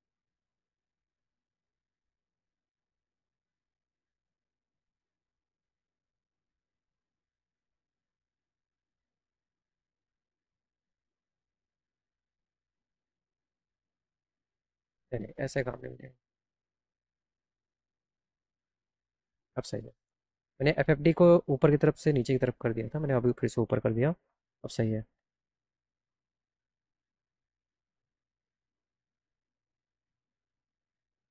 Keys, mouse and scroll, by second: 1.6 right click, 2.9 right click, 3.7 click, 4.1 right click, 4.7 click, 5.3-7.3 drag, 15.3 scroll down 1, 15.8 click, 25.5 click, 27.9 click.